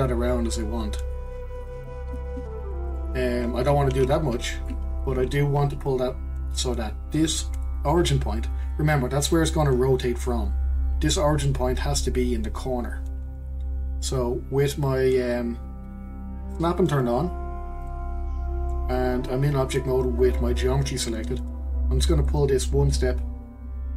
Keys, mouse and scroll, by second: 2.4 ctrl+z, 3.9 ctrl+z, 4.3 ctrl+z, 5.1-8.2 scroll up 1, 17.8-20.8 drag, 22.2 click.